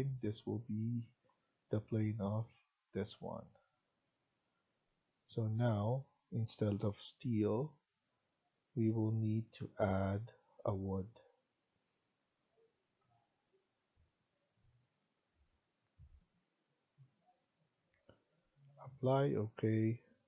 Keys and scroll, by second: 1.3 Tab.